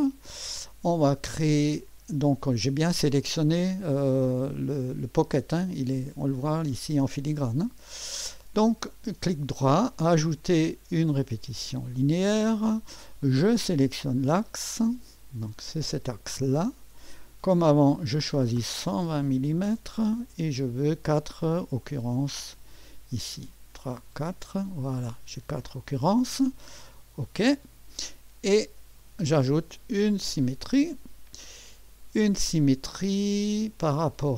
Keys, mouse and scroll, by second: 2.9 click, 8.0 click, 9.4 right click, 11.4 click, 13.9 click, 15.1 click, 16.4 click, 17.9 click, 18.9-20.2 typing, 21.3 click, 27.4 click, 29.0 right click, 30.5 click, 33.4 click.